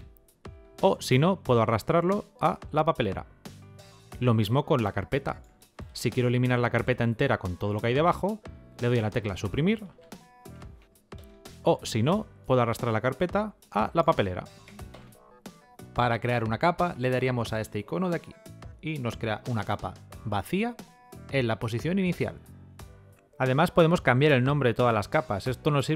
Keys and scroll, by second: 8.7 Delete.